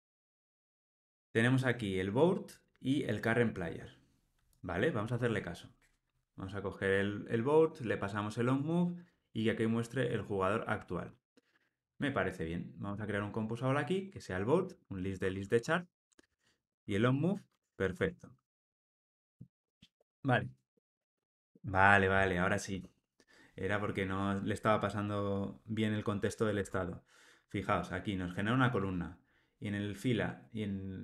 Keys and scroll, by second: 11.0 alt+Return, 14.6 alt+Return, 16.2 Return, 26.6 Tab.